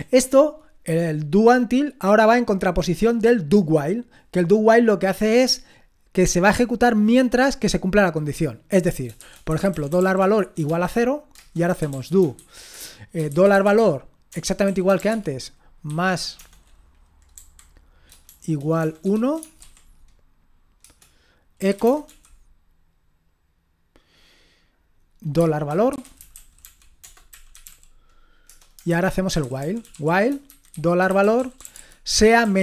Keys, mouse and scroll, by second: 9.2-19.6 typing, 20.8-22.1 typing, 25.7-32.6 typing.